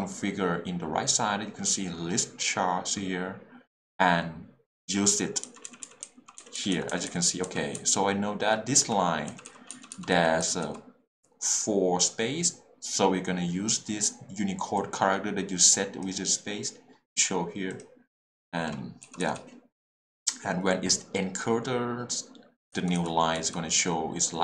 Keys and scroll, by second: 5.4 k, 7.7 j, 8.8 k, 9.3 l, 9.7 h, 10.1 l, 19.0 l.